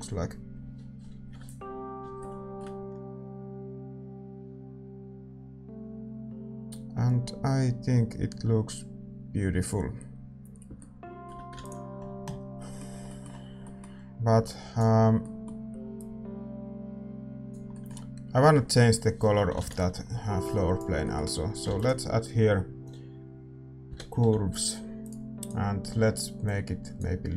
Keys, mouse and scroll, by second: 0.8 shift+z, 14.4 ctrl+s, 14.4-25.3 drag, 26.6-27.3 drag.